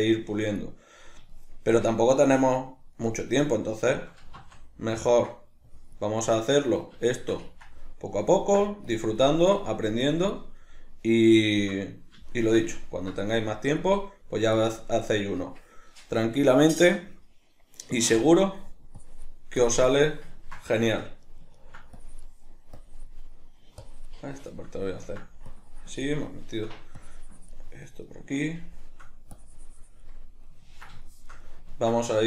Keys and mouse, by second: 2.4-3.0 drag, 3.0-5.7 middle drag, 4.3 z, 5.7-6.1 drag, 6.1-8.9 middle drag, 8.9-10.6 drag, 10.6-13.5 middle drag, 13.5-14.0 drag, 14.0-14.6 middle drag, 14.6-20.4 drag, 20.4-22.0 ctrl+middle drag, 22.0-23.4 drag, 23.4-23.8 middle drag, 23.8-24.3 drag, 24.3-25.5 shift+middle drag, 25.5-26.3 drag, 26.3-27.0 shift+middle drag, 27.0-28.1 drag, 28.1-29.4 middle drag, 29.4-30.2 drag, 30.2-32.2 middle drag.